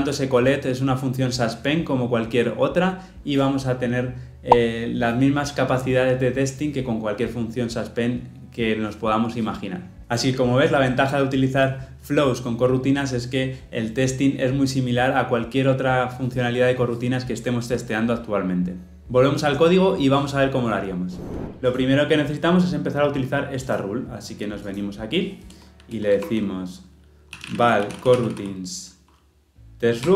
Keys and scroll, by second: 30.0 Return.